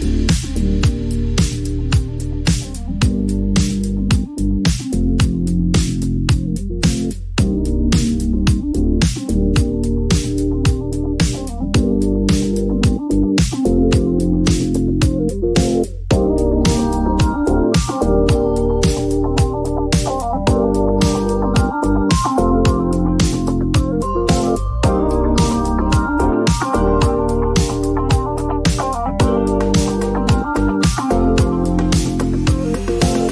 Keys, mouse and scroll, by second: 0.0-1.4 typing, 4.6 click, 5.9 right click, 8.9 click, 11.0 typing, 14.5 click, 17.9 click, 20.0-21.7 typing, 22.6 click, 22.8 click, 25.9 click, 27.5 click, 28.8 click, 31.8 click, 33.2 click.